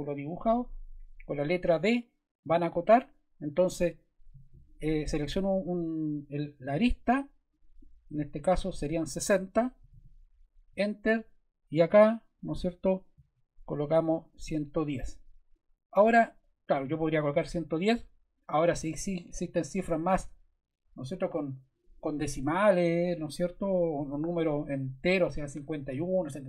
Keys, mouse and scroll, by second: 2.4 d, 4.6 click, 7.5 click, 9.5-10.4 typing, 10.7 Return, 14.2 click, 14.8 click.